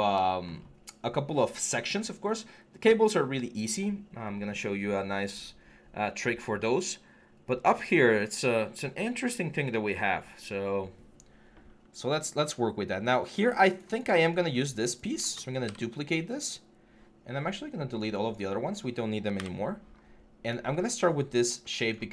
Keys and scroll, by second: 15.5 ctrl+d, 19.2 Delete.